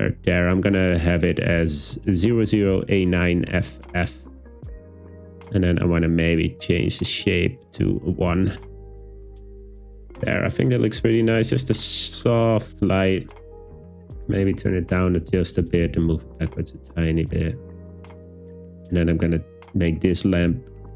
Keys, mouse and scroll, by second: 4.3 click, 5.1 click, 7.8 click, 13.3-14.3 drag, 15.6 g, 15.7 z, 16.0 z, 17.9 click.